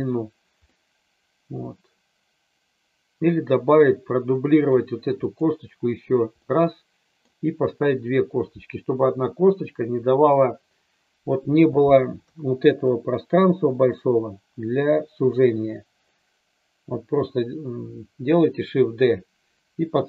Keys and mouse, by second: 0.7-4.8 middle drag, 5.2 click, 6.3-7.2 middle drag, 12.2 KP_3.